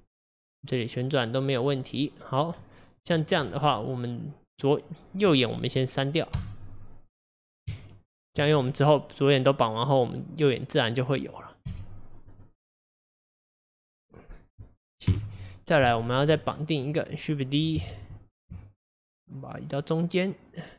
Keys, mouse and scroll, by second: 2.6 scroll down 1, 2.6-3.3 middle drag, 3.3 scroll up 2, 4.6 click, 6.4 x, 7.7 Tab, 11.7 x, 13.1 click, 15.1 KP_7, 16.0 shift+middle click, 16.3 shift+scroll up 2, 16.9 click, 17.9 shift+d.